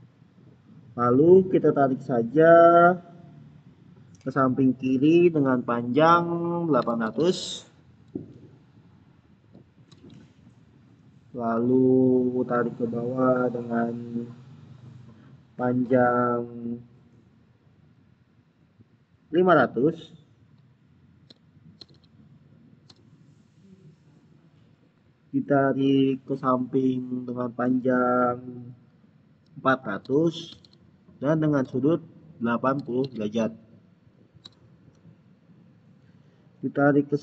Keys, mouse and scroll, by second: 6.5-7.6 typing, 9.5-10.2 typing, 21.2 Return, 21.4-22.3 typing, 22.7 Return, 29.7-31.0 typing, 31.5 Tab, 32.6 typing, 34.3 Return.